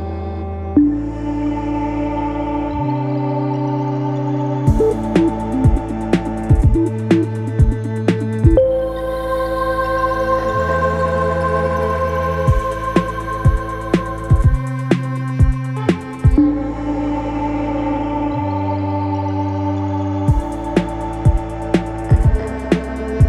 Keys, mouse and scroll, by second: 7.5-8.2 scroll up 1, 12.4-13.6 scroll up 1, 14.7-15.4 scroll up 1, 15.7-16.7 scroll up 1, 17.9 click, 22.5-23.2 drag.